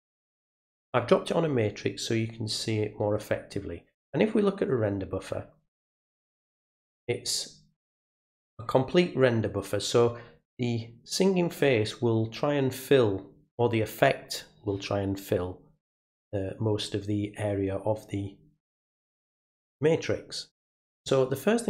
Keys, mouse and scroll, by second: 4.7 click.